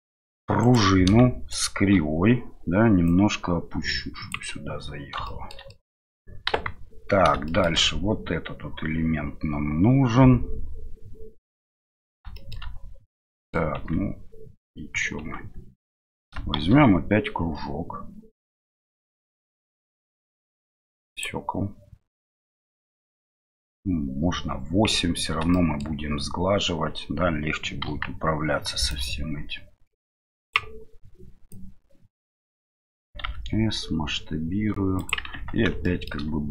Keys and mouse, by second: 5.8 middle click, 6.5 KP_1, 13.2-13.5 middle drag, 13.8 Tab, 16.5 shift+a, 25.7 shift+middle click, 28.9-30.8 drag, 31.6-32.7 drag, 35.3 Tab, 35.8 shift+middle click.